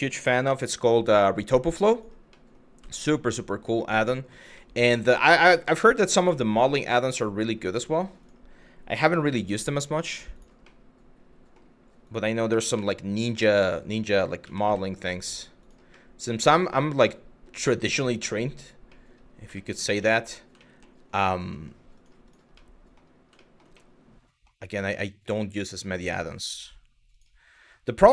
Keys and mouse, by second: 0.1 y, 1.5 click, 2.0 middle click, 2.6 shift+middle click, 3.0 middle click, 3.7 shift+middle click, 4.3 middle click, 5.2 shift+middle click, 5.7 middle click, 6.0 shift+middle click, 6.8 shift+middle click, 8.6 g, 8.9 y, 10.0 click, 10.3 middle click, 12.1 g, 12.4 y, 13.2 click, 15.2 click, 15.7 middle click, 16.2 shift+middle click, 16.7 middle click, 17.5 middle click, 18.6 middle click, 19.2 shift+middle click, 19.6 middle click, 20.3 shift+middle click, 21.6 click, 22.2 middle click, 23.1 shift+middle click, 23.5 middle click, 24.6 shift+middle click, 26.7 click.